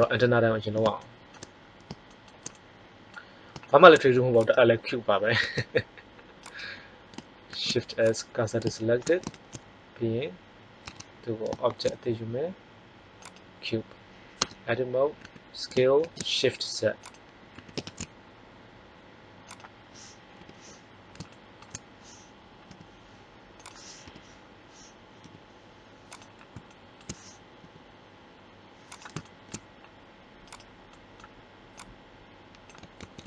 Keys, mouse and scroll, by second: 4.4 click, 5.3 Tab, 7.5 shift+s, 7.9 click, 9.2 shift+a, 10.8 Tab, 11.6 shift+a, 14.3 Tab, 15.2 s, 17.5 s, 20.3 KP_3, 22.6 g, 24.0 KP_1, 25.1 g, 27.5 g, 31.7 click, 31.7 right click, 32.9 ctrl+z.